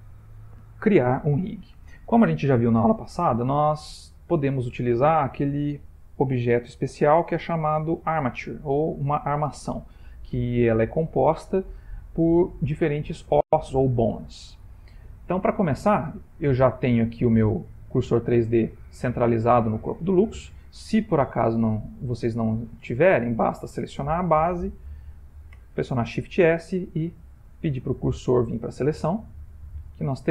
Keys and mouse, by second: 18.0 middle click, 19.1 middle click, 23.3 click, 25.6 shift+s, 28.9 middle click.